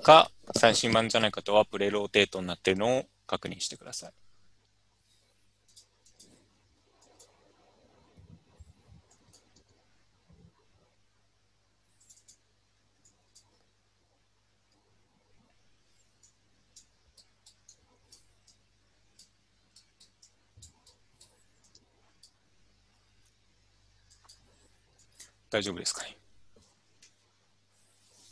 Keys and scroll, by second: 8.1 u.